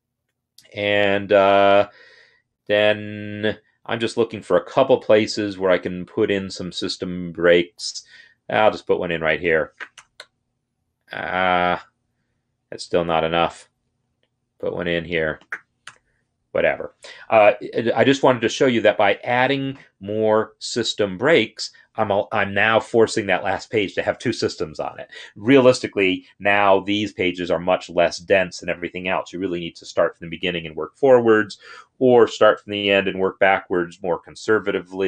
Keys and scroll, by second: 4.4 Escape, 10.0 Return, 15.7 Return.